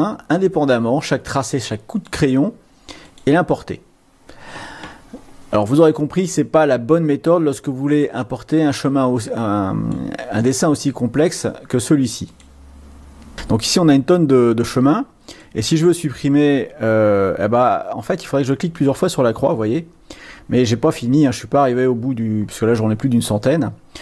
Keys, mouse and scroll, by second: 3.2 click, 7.5-10.1 drag, 12.4 click, 13.5-14.2 scroll down 4, 15.7 click, 16.6 click, 18.2 click, 18.5 click, 18.7 click, 22.1-23.1 scroll up 4.